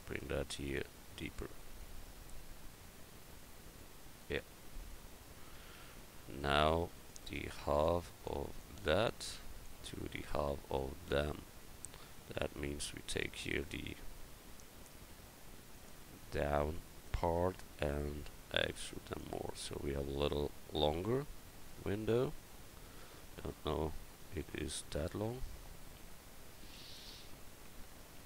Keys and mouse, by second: 0.1-2.2 right drag, 5.8 Tab, 7.1-9.1 right drag, 7.8 click, 9.1-10.9 drag, 10.9 Tab, 11.9-13.0 drag, 15.1 click, 23.9 Tab, 27.0 KP_1.